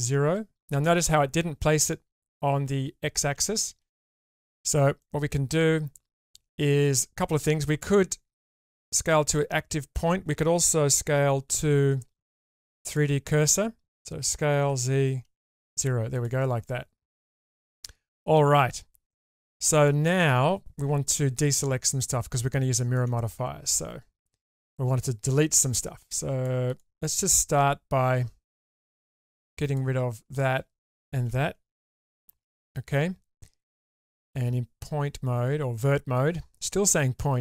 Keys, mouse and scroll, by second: 3.8 ctrl+z, 5.0-8.5 middle drag, 11.5 ., 14.3 s, 16.6-19.9 middle drag, 21.5-22.9 middle drag, 23.7 click, 25.3-26.4 drag, 28.0 2, 30.8 alt+shift+click, 32.1 ctrl+x, 33.9 1, 36.1-37.4 drag.